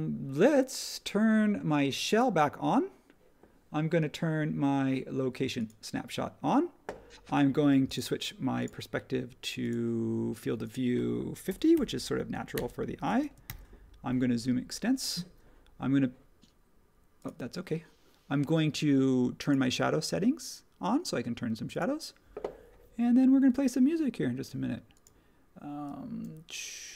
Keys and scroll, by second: 11.4 typing, 12.5 Return, 13.1 space, 13.4 super+[.